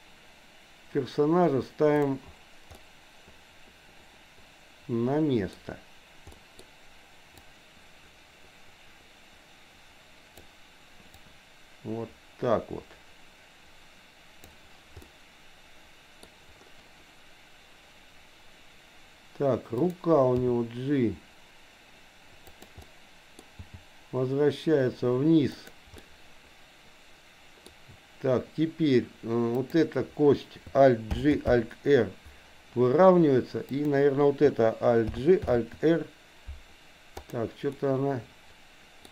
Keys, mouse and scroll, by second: 2.8-5.6 middle drag, 2.8 scroll up 1, 6.4 middle click, 7.3 click, 7.6-10.6 drag, 11.4-14.6 drag, 15.0-16.1 middle drag, 19.9 click, 20.4 g, 22.8 middle click, 23.6 g, 26.0-27.8 middle drag, 26.0 scroll up 1, 27.6 scroll down 1, 29.5 click, 31.1 alt+g, 31.6 alt+r, 33.8 click, 35.1 alt+g, 35.4 r, 37.6-39.1 middle drag.